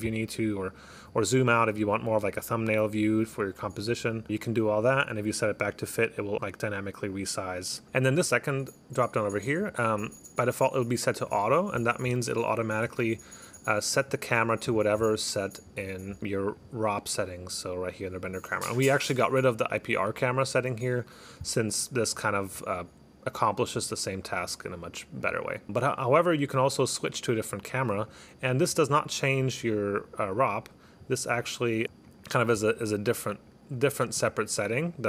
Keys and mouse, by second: 4.6 click, 5.0 click, 7.3 click, 8.3 click, 9.5 click, 11.4 click, 12.8 click, 13.6 click, 14.0 click, 16.6 click, 22.1 click, 22.6 click, 23.7 click, 24.2 click, 25.3 click, 28.1 click, 32.1 click, 32.2 click, 33.4 click, 33.8 click, 34.6 click, 34.9 click.